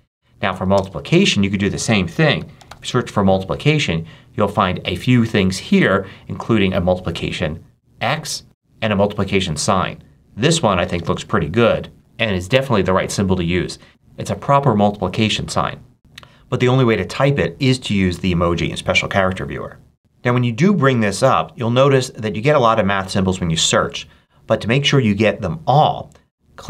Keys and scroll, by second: 0.5 ctrl+super+BackSpace, 0.7 ctrl+super+space, 1.8-3.1 typing, 20.0 ctrl+super+space.